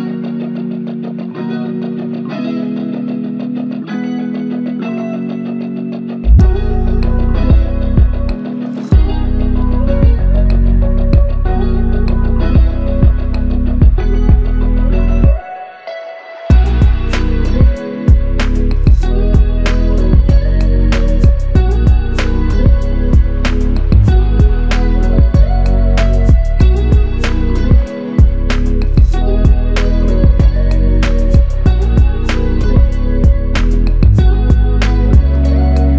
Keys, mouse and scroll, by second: 1.2 ctrl+click, 1.8 ctrl+click, 3.9 alt+click, 19.4 ctrl+click, 26.9 alt+click, 31.3 ctrl+click.